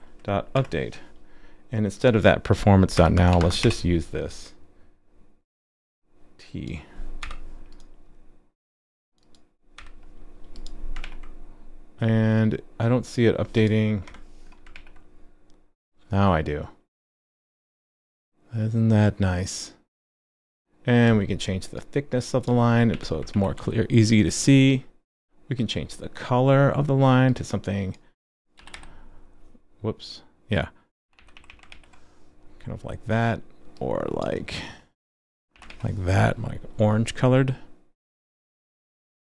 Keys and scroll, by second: 11.0 super+s, 14.7 super+s, 23.3 super+s, 31.7 super+s, 35.7 super+s.